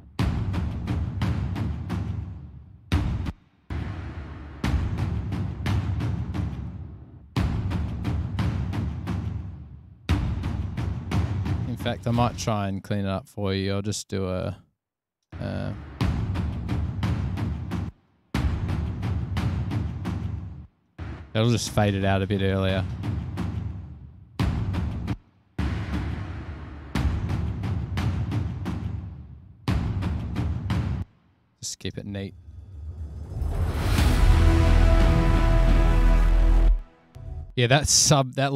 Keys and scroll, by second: 3.5 space, 3.8 space, 10.3 super+e, 12.4 super+e, 13.0 f, 14.8 F7, 15.6 space, 17.4 f, 18.2 space, 18.4 space, 21.3 F8, 24.2 Return, 24.8 F7, 25.4 space, 25.6 space, 27.5 F6, 30.6 super+z, 31.3 space, 31.5 F7, 32.2 space, 36.9 space, 37.4 space, 37.8 space.